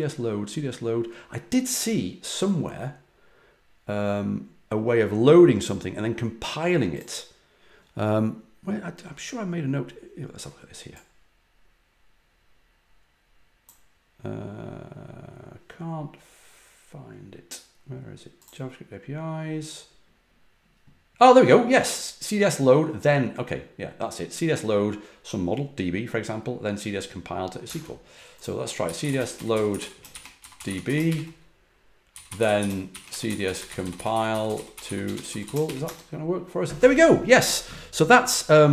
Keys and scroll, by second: 27.6 super+Tab, 28.5-36.1 typing.